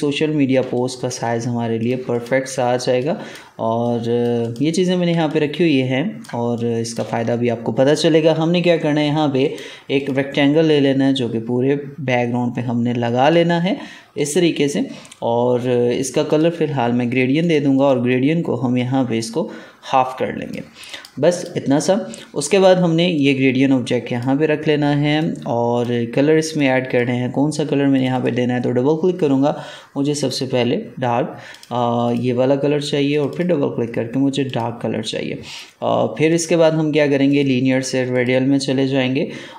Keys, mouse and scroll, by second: 0.6 space, 0.6 click, 1.0 space, 1.7-4.3 drag, 5.0 ctrl+space, 5.2 ctrl+click, 6.5 click, 6.8 space, 7.4 alt+scroll down 1, 9.3 right click, 9.9-27.8 drag.